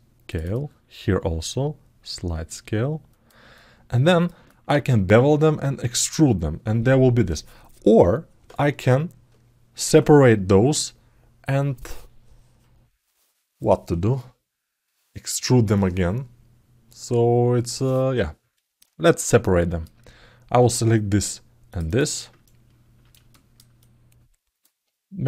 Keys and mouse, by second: 0.2 click, 3.3 alt+middle click, 4.2 ctrl+alt+middle click, 19.2 ctrl+alt+middle click, 19.4 ctrl+alt+right click, 21.6 shift+middle click, 22.2 ctrl+alt+middle click, 23.1 alt+shift+middle click, 23.5 alt+middle click.